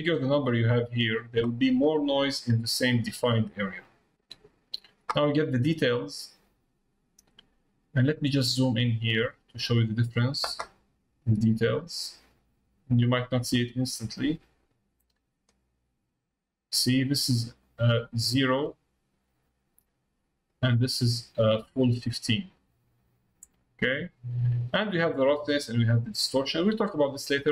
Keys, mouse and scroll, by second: 6.0-7.5 drag, 8.1 middle click, 10.9 click, 14.1-15.7 drag, 17.7 click, 20.4-21.6 drag, 24.1 click, 26.5 click.